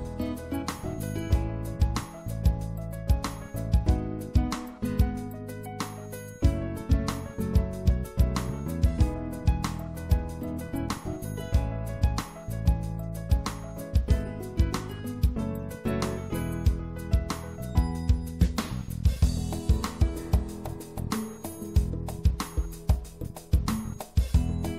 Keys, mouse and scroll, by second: 0.5-4.7 middle drag, 4.7-6.4 drag, 7.4-9.5 middle drag, 9.5-12.5 drag, 12.5 right click, 13.0 middle click, 15.5 right click, 17.1 click, 17.3 middle click, 17.5 middle click, 19.5-21.7 middle drag, 23.9-24.7 right drag.